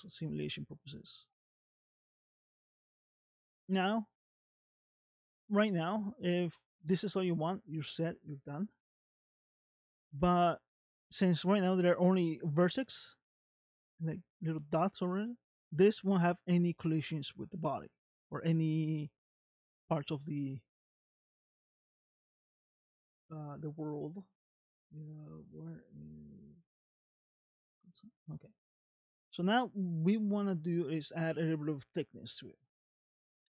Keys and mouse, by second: 0.8 space, 1.9 click, 2.4 middle click, 4.6 middle click, 17.0 middle click, 18.5 middle click, 27.8 click, 28.5 middle click.